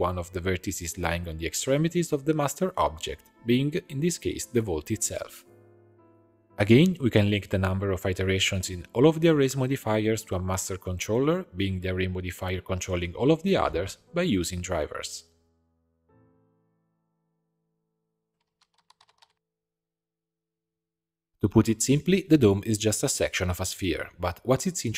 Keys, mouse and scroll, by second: 1.5 click, 1.9-4.2 drag, 4.2 g, 6.8-7.4 scroll down 2, 7.4-8.5 middle drag, 8.5 click, 8.6-10.2 right drag, 10.2 click, 10.9-15.5 right drag, 15.6-18.3 shift+drag, 21.2 click, 21.9 click, 22.1 Tab, 22.5 a.